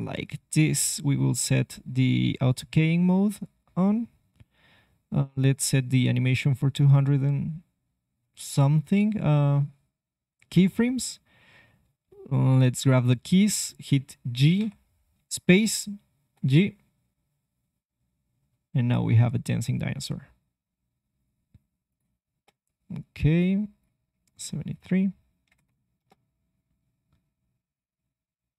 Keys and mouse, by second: 2.4-4.4 drag, 4.4-6.9 middle drag, 13.9 g, 16.1 space, 16.5 g, 22.0 click, 22.3 space, 25.9 space.